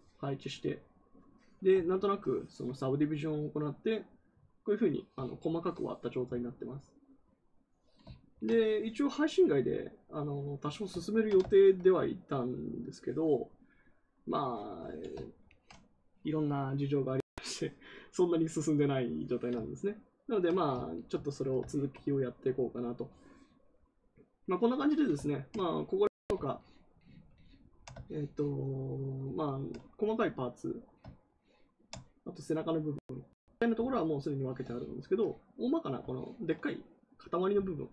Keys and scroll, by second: 32.7 a.